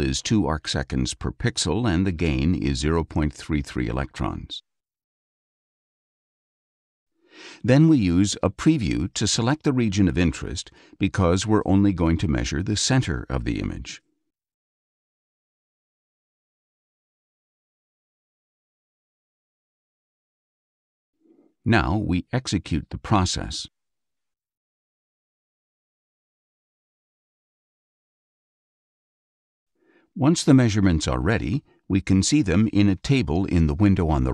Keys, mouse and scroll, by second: 0.3 Tab, 2.7 KP_0, 2.9 KP_Decimal, 3.9 KP_3, 4.3 Tab, 5.2 click, 6.7 ctrl+a, 8.5 click, 9.9-12.4 drag, 14.4-17.8 ctrl+drag, 19.5 click, 22.4 click, 31.6-34.3 drag.